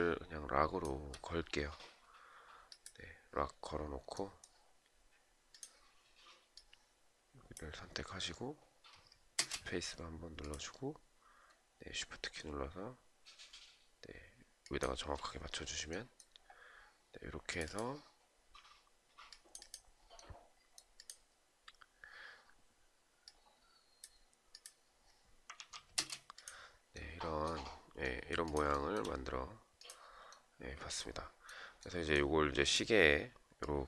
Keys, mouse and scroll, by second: 8.9 space, 14.1 shift+click, 25.1 ctrl+a, 28.2 shift+right click.